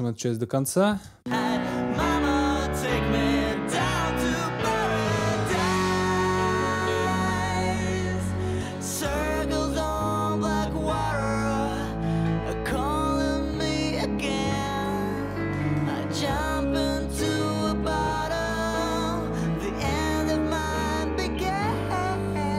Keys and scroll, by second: 0.9 space.